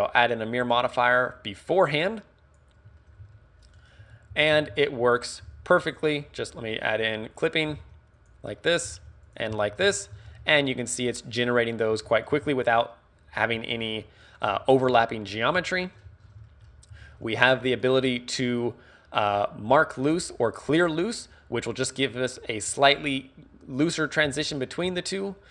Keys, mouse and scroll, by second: 2.6 click, 3.0 shift+middle click, 3.3-5.5 typing, 3.4 middle click, 5.4 click, 6.0 click, 7.4 click, 7.7 g, 8.3 click, 8.7 right click, 8.9 g, 9.4 click, 9.5 scroll up 3, 9.7 z, 9.9 shift+middle click, 10.2 scroll up 2, 10.3 z, 10.5 middle click, 11.4 middle click, 12.0 a, 12.2 right click, 12.3 z, 12.5 g, 14.5 click, 14.5 z, 14.9 KP_1, 15.8 shift+middle click, 16.1 z, 16.2 scroll down 3, 16.5 shift+middle click, 17.0 z, 17.3 a, 17.7 right click, 21.0 click, 24.3 ctrl+z, 24.9 z.